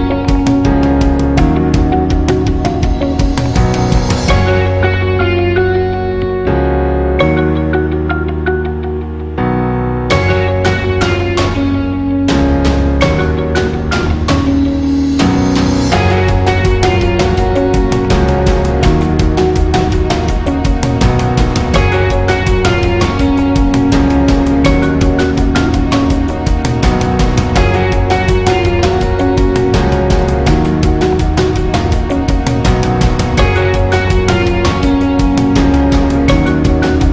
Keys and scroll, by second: 0.8 alt+shift+?, 6.5 super+æ.